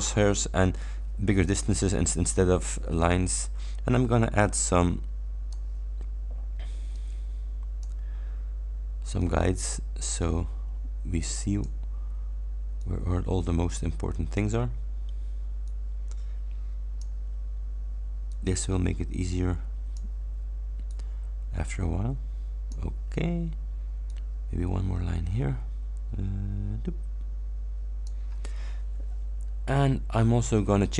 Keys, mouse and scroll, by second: 3.2-5.8 drag, 7.0-8.1 drag, 9.2-11.9 drag, 12.8-14.6 drag, 15.7-17.2 drag, 18.4-20.2 drag, 21.0-23.0 drag, 24.2-28.4 drag.